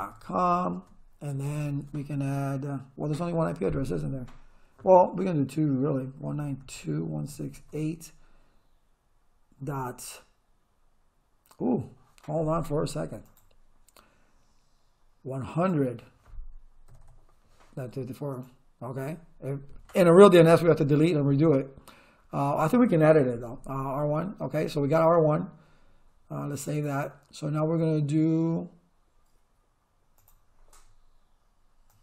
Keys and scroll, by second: 0.0-0.7 typing, 0.8 Tab, 5.9-8.2 typing, 9.6 ., 16.9 0.